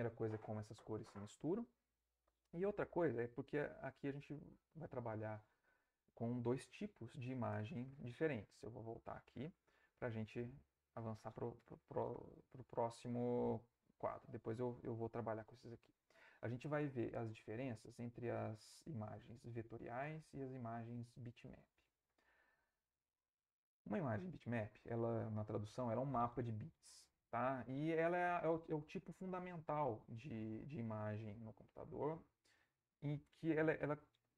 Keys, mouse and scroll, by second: 8.7 alt+Tab, 10.4 Right, 12.8 Right, 14.5 Left, 15.5 Right.